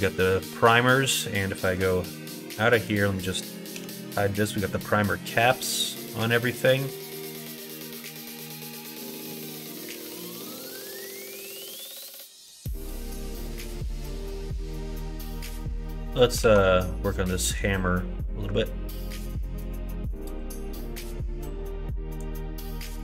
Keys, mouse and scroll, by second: 2.8 click, 3.7 h, 4.4 middle click, 6.0 middle click, 6.6-9.3 middle drag, 12.8 Tab, 13.3-14.6 middle drag, 15.0 middle click, 15.5 KP_1, 15.8 KP_3, 16.4 alt+z, 19.2 4, 19.6 3, 20.3-22.2 drag.